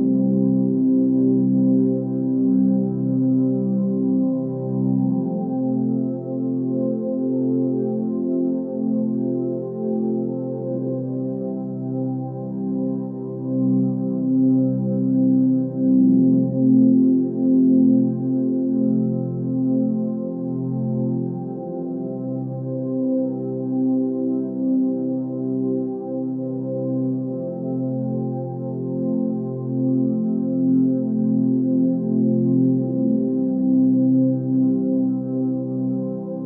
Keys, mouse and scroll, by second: 4.8 scroll down 1, 6.5-8.4 drag, 24.4-25.3 scroll down 2, 25.3-26.1 drag, 29.9 scroll down 1, 31.4-32.0 drag.